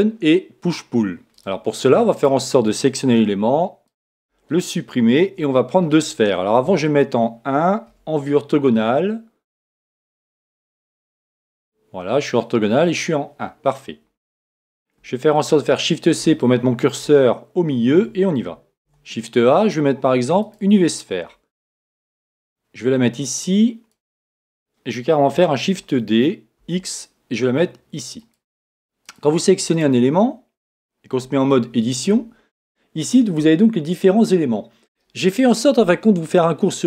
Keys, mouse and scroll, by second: 1.5-3.2 drag, 2.1-3.9 right drag, 3.5 x, 6.6 KP_1, 10.9 KP_5, 12.7 KP_5, 15.4 shift+c, 17.1-19.1 middle drag, 18.9 shift+a, 22.4-24.4 drag, 25.7 shift+d, 28.3-30.9 drag, 29.7-31.6 right drag, 31.2 Tab.